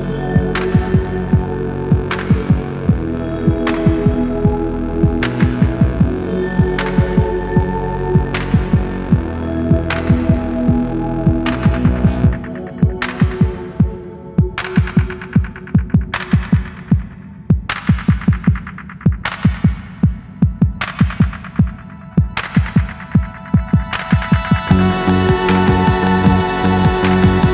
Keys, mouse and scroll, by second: 4.8-7.6 drag, 7.9-8.3 alt+scroll up 2, 8.5 alt+click, 8.8-9.1 alt+scroll up 3, 9.3 alt+middle click, 9.7-10.1 scroll down 2, 10.3 shift+right click, 11.1 scroll down 4, 11.3-12.6 alt+drag, 12.7-13.3 scroll up 4, 13.5 alt+middle click, 13.7-14.1 scroll up 3, 14.3-14.9 alt+drag, 15.1 scroll down 1, 15.5 alt+middle click, 15.7-16.4 scroll down 4, 17.2-18.1 drag, 18.2-18.8 scroll down 4, 19.0 alt+middle click, 19.8 click, 20.4 alt+middle click, 20.5 scroll down 1, 20.9 click, 22.0 click, 24.7 click.